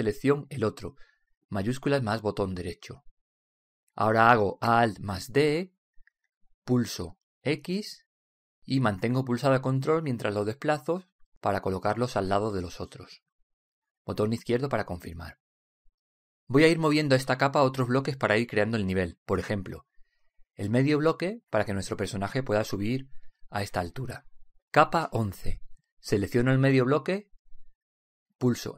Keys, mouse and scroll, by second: 1.4 right click, 6.0 alt+d, 15.4-19.5 middle drag, 21.7-23.4 drag, 26.9 right click.